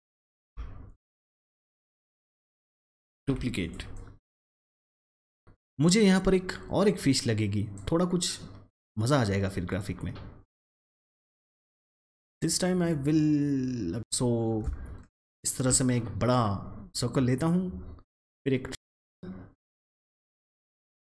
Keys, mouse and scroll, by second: 1.4 ctrl+d, 3.5-9.6 drag, 12.0-17.4 drag, 17.4-21.1 drag.